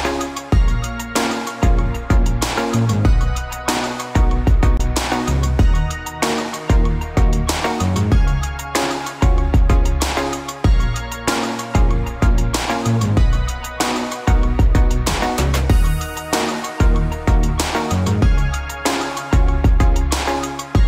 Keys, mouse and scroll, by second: 3.6-6.7 drag, 6.0-7.9 middle drag, 8.0 middle click, 8.5 middle click, 9.0 middle click, 10.2 a, 10.6-12.6 middle drag, 12.9 middle click, 15.5 middle click, 16.3-18.3 middle drag, 18.6 ctrl+r.